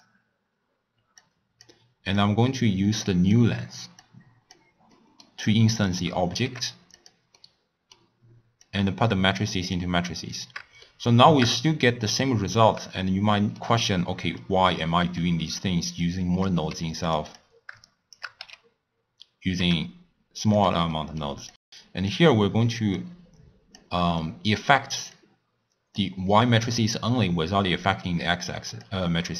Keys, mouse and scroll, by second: 0.0 click, 1.1 click, 2.1 click, 4.0 click, 4.9-5.8 middle drag, 5.8 drag, 6.4 g, 7.3-8.6 middle drag, 8.6 drag, 10.8-11.9 shift+middle drag, 11.9-13.0 scroll down 1, 13.0-16.0 middle drag, 16.0 drag, 16.7 g, 17.3 drag, 17.8-18.4 shift+right drag, 18.4 h, 19.6 g, 20.9-21.5 middle drag, 21.5 click, 22.9 click, 24.1 click, 25.1 click, 26.4 middle click, 26.8-27.6 scroll down 1, 28.7 click.